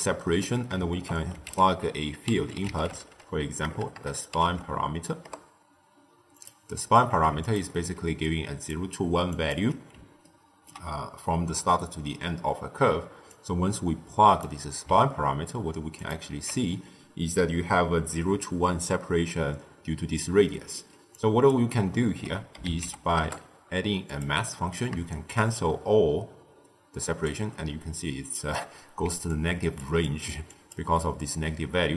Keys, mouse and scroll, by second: 0.8 ctrl+a, 3.7 BackSpace, 3.8 BackSpace, 6.6-7.3 middle drag, 7.3 alt+shift+click, 7.9 d, 8.2 click, 8.6-9.1 d, 9.3 click, 9.4 d, 9.6 d, 10.2-13.2 ctrl+middle drag, 13.2 drag, 15.9 alt+shift+click, 20.3-21.1 middle drag, 21.1 click, 21.9 ctrl+a, 24.4 middle click, 25.3-28.3 shift+drag, 29.0-30.8 typing, 29.2-29.7 drag, 29.9 click, 30.4 click.